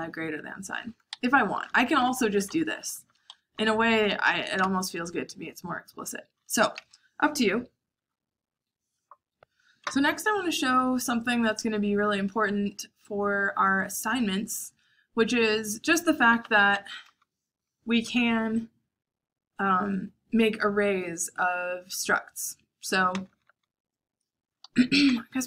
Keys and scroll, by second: 0.0 h, 1.1 Escape, 1.4-4.6 typing, 4.2 Escape, 10.4-14.5 typing, 17.2-18.3 typing, 23.0-23.4 typing, 24.4-25.2 typing.